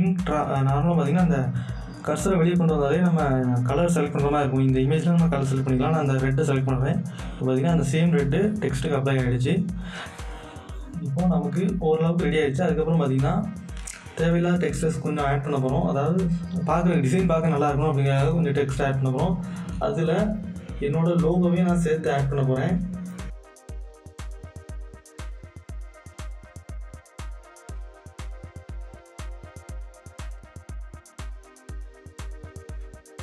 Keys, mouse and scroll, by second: 6.1 click, 21.4 click, 21.4 click, 23.4 Return, 23.6 click, 23.7 scroll, 23.8 alt+scroll down 1, 24.1 click, 25.1 ctrl+t, 25.3 shift+click, 25.6 alt+scroll up 1, 25.8 Return, 26.0 click, 26.6 right click, 26.8 click, 28.2 click, 28.9 click, 29.9 right click, 29.9 click, 30.3 ctrl+t, 30.5 click, 31.5 Return, 31.7 right click, 31.8 click, 32.1 scroll up 1, 32.3-32.7 scroll down 2, 33.0 click.